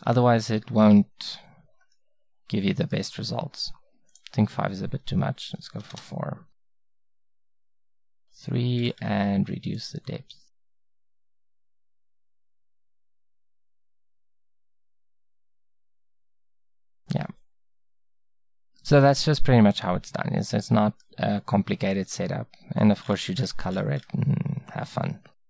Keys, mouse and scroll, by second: 0.9-4.1 middle drag, 7.7-12.6 middle drag, 13.0-15.6 middle drag, 16.7 middle click, 18.4-22.7 middle drag, 23.1 middle click.